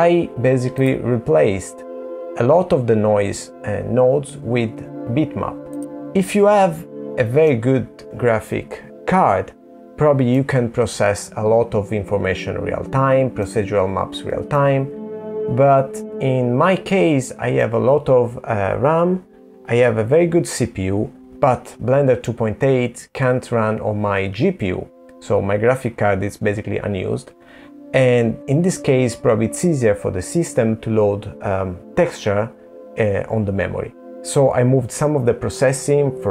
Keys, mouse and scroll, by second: 2.0 middle click, 5.8 middle click, 7.4 middle click.